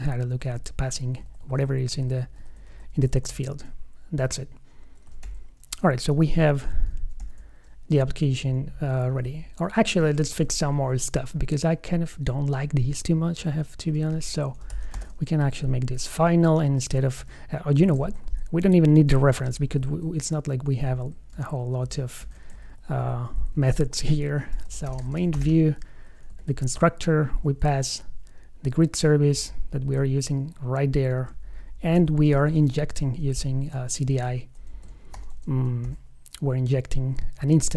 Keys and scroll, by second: 0.2 super+s, 1.4 alt+shift+Right, 5.4 shift+super+f, 6.4 shift+super+o, 7.5 super+s, 10.6 super+Left, 13.1 alt+Right, 18.2 shift+super+Right, 19.5 super+x, 21.6 super+d, 22.8 alt+Right, 23.5 alt+Left, 23.8 alt+shift+Right, 26.6 super+v, 32.5 super+Left, 34.4 super+s, 35.3 shift+super+o, 35.6 shift+super+f, 36.2 super+s.